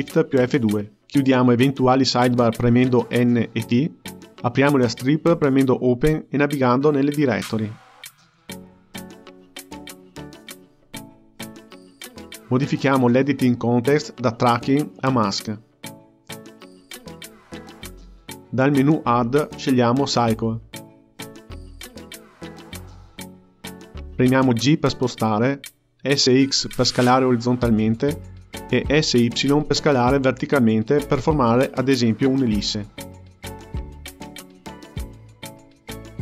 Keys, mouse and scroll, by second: 2.6 click, 5.6-8.9 drag, 9.9-10.4 scroll down 8, 10.4-13.0 scroll up 2, 13.0-16.1 drag, 20.2-23.2 drag, 23.9 g, 27.7 s, 30.7 g, 33.6 s.